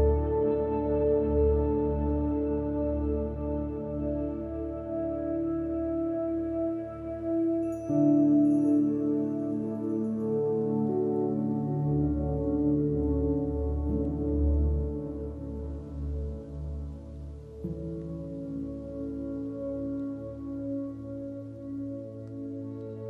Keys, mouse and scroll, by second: 0.1 shift+a, 2.1 click, 2.9 click, 3.8 click, 4.3 click, 5.3 drag, 5.5 middle click, 6.6 middle click, 7.4 click, 8.0 click, 8.6 click, 9.2 click, 9.4 click, 10.1 click, 10.2 click, 10.5 ctrl+shift+d, 11.2 click, 11.4 ctrl+middle drag, 12.1 middle drag, 12.4 middle click, 12.9 middle click, 13.0 middle drag, 13.5 click, 14.3-14.7 drag, 15.0 click, 15.8 v, 15.8 drag, 16.4-16.8 drag, 17.5 shift+a, 18.8-19.4 drag, 19.6 middle drag, 19.9-20.4 middle drag, 20.8 middle click, 21.5 middle drag, 21.9 middle click, 22.6 middle click.